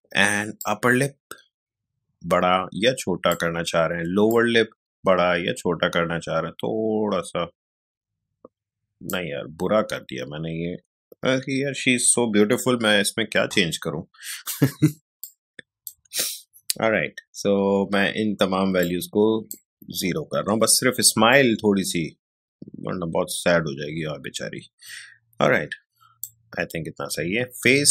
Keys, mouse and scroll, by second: 12.9 0, 15.2-17.2 drag, 17.2 0, 18.8-26.8 drag, 26.8-27.9 scroll down 1.